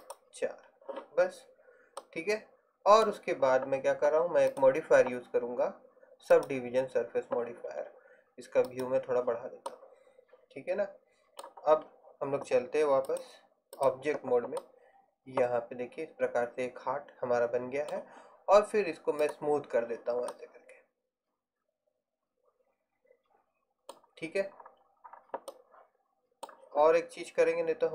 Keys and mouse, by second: 2.1 middle click, 4.6-6.6 drag, 10.0-12.1 middle drag, 14.7-16.7 middle drag, 19.3-20.4 drag, 20.4 middle click.